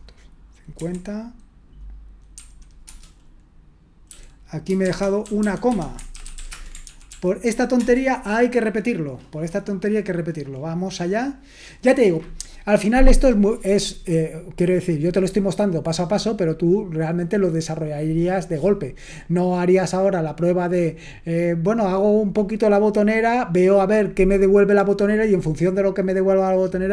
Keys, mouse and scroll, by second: 0.0-0.7 typing, 5.4-6.8 typing, 6.9 ctrl+p, 7.1 ctrl+p, 7.7 Return.